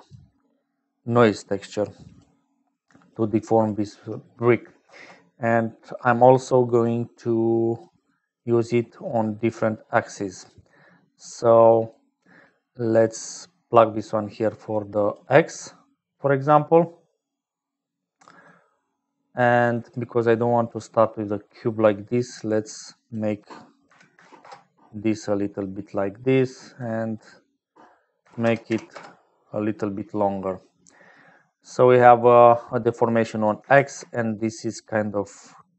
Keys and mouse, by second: 0.0-35.7 typing, 3.0 click, 4.2 click, 9.0 click, 10.1 click, 10.9 click, 11.6 click, 12.9 click, 13.7-15.3 drag, 18.3 click, 19.0 click, 23.1-25.3 drag, 26.8-29.7 drag, 30.1-31.1 drag, 31.9 click, 33.2 click.